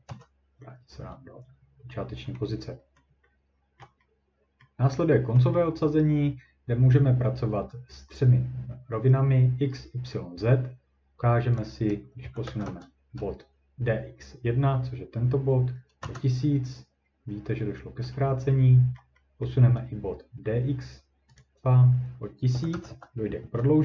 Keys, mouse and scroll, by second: 0.1 Return, 2.4-2.8 scroll, 3.0 scroll down 1, 3.8 ctrl+scroll down 1, 4.6 scroll down 1, 5.6 scroll down 1, 8.8 scroll, 11.6 click, 12.2 typing, 16.0 Return, 19.0 ctrl+middle click, 19.0-19.5 ctrl+scroll, 21.4 click, 22.3-23.2 typing, 23.4 Return.